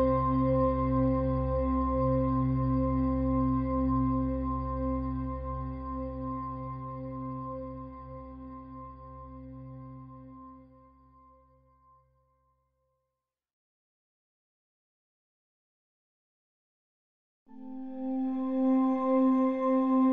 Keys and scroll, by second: 2.2 -.